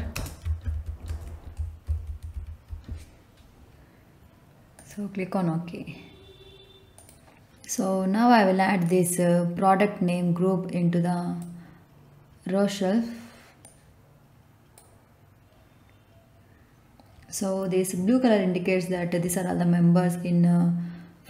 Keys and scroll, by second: 0.0-3.2 typing.